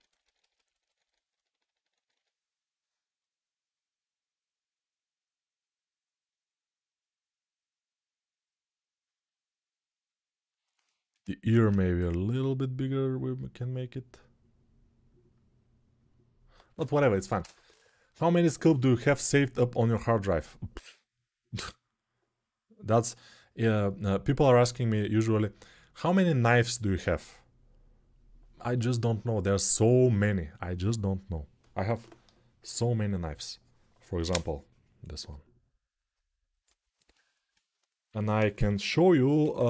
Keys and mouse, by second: 0.3 ], 11.4 alt+q.